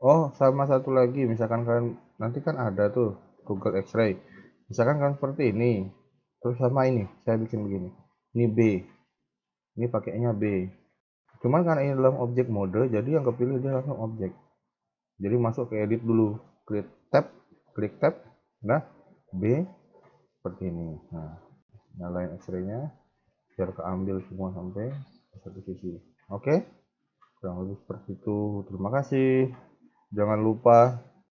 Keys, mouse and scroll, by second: 1.3-1.6 scroll up 1, 1.6 scroll down 1, 1.7-3.9 scroll down 2, 2.0-3.9 scroll up 1, 3.9 Tab, 4.5 a, 4.7 a, 4.9 scroll down 3, 6.1 b, 7.5 b, 8.7 b, 10.2 b, 11.8 scroll up 1, 12.1 middle click, 13.4 KP_1, 16.8 Tab, 19.2 b, 20.2 middle click, 20.8 KP_1, 22.1 click, 22.4 a, 22.6 a, 23.1 b, 23.8 middle click, 25.5 KP_1, 25.9 scroll up 2, 27.5-28.5 scroll down 1.